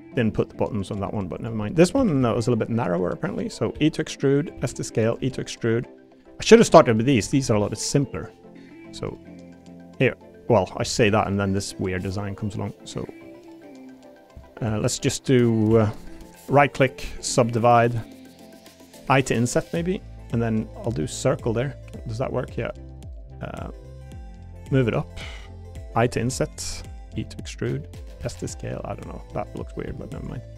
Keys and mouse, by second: 0.5 shift+middle click, 1.4 click, 1.6 middle click, 1.9 s, 2.2 y, 3.4 click, 3.7 e, 4.4 click, 4.5 s, 5.2 e, 6.2 click, 6.4 click, 6.7 l, 7.2 a, 7.4 g, 8.1 click, 9.6 click, 10.9 ctrl+r, 13.8 click, 14.6 3, 15.7 2, 16.5 click, 19.0 i, 20.3 click, 21.3 click, 24.6 click, 26.1 i, 27.1 e, 28.0 click, 28.2 s, 29.1 click, 29.6 middle click, 29.8 2.